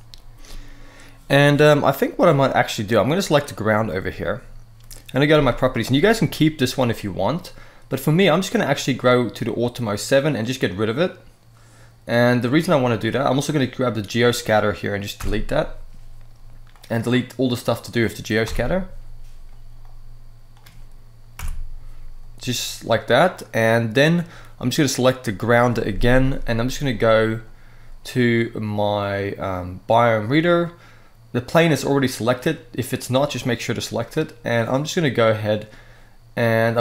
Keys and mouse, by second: 2.7 click, 3.6 middle drag, 5.0 n, 10.4 click, 12.9 click, 14.9 Delete, 16.4-17.2 drag, 18.2 Delete, 19.5-20.2 drag, 21.1 Delete, 23.3-23.9 middle drag, 24.5 click, 32.7 click.